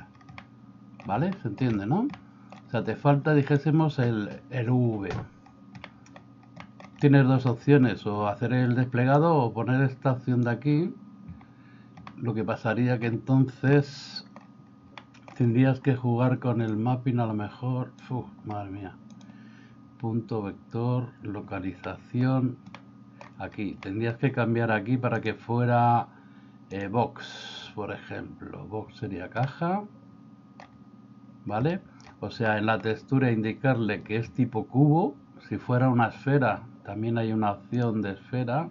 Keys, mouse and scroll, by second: 0.4 middle click, 1.4 shift+middle click, 2.1 middle click, 5.9 middle click, 6.8 middle click, 7.6 middle click, 9.2-10.6 drag, 12.1-13.0 middle drag, 14.0 middle click, 15.1 middle click, 16.7-18.1 drag, 19.2-20.5 drag, 21.9 middle click, 22.9 middle click, 24.0 middle click, 25.3-27.0 drag, 29.4-30.6 middle drag, 32.5 middle click, 37.8-38.7 drag.